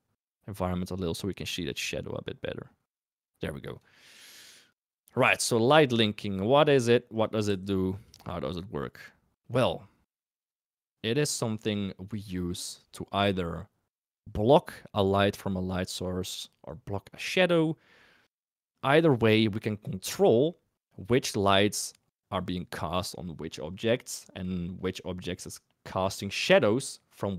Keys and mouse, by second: 4.7 click, 5.3 middle drag, 5.9 middle click, 7.1 click, 7.4 s, 8.6 middle drag.